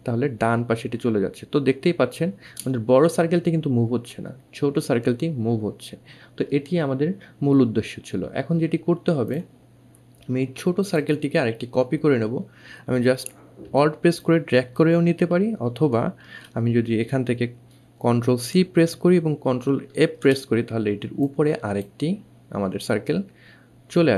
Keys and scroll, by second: 18.7 ctrl+c, 20.2 ctrl+f.